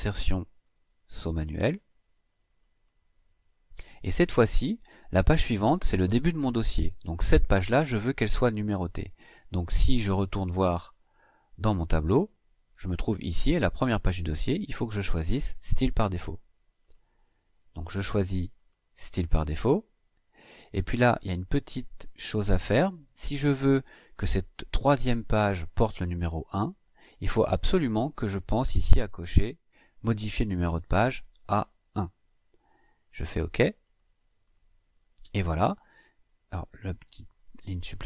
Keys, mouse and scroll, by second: 2.4 click, 10.8 click, 16.6 click, 18.3 click, 20.1 click, 29.1 click, 33.6 click, 34.7-35.0 scroll down 1, 35.3-35.6 scroll down 2.